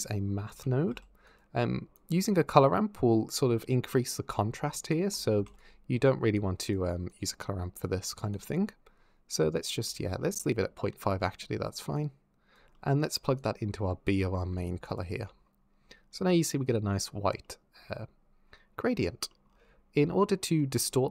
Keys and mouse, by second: 1.8 click, 4.7 alt+click, 5.3 shift+a, 6.2 click, 6.9 click, 8.2-9.7 shift+drag, 10.5 ctrl+z, 11.8 click, 13.2 click, 14.7 ctrl+shift+click, 17.3 click.